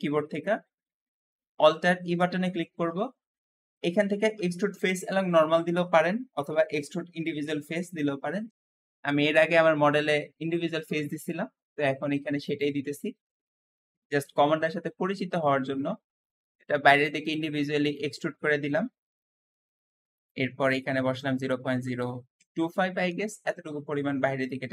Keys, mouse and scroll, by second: 0.2-1.4 scroll up 1, 1.8 alt+e, 2.0 alt+e, 18.3 middle click, 18.8-19.9 scroll up 2, 20.0-22.3 drag, 20.8-22.5 typing, 22.9 Return, 23.0 Return, 24.3 middle click.